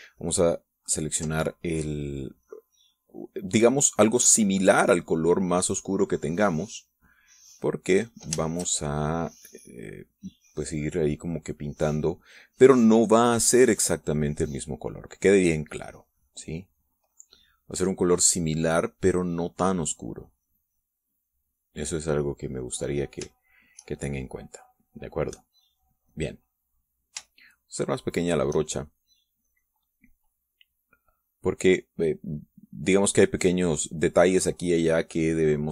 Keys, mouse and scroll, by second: 0.8-1.9 ctrl+drag, 2.2-8.7 ctrl+drag, 8.7-17.8 shift+drag, 24.0 shift+click, 24.6-28.8 shift+drag, 28.9 shift+click, 29.3-35.1 shift+drag.